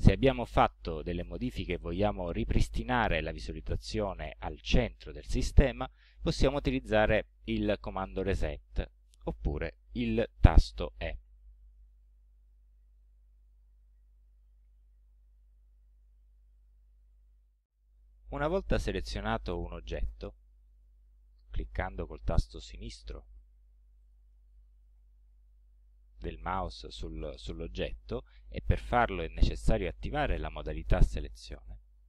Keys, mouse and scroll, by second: 11.3 e, 14.4-15.6 drag, 15.7-16.0 scroll down 2, 16.3 scroll down 2, 20.8 click, 21.5 click, 22.4 click, 24.0-26.6 drag, 31.0 click.